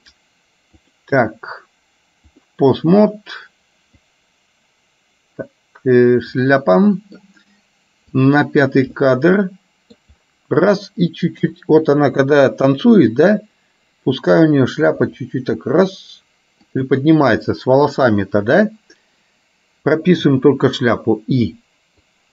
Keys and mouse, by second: 1.0-2.6 drag, 4.1-6.6 drag, 6.9 middle click, 8.4 click, 9.0-10.0 middle drag, 11.5 KP_3, 15.0 r.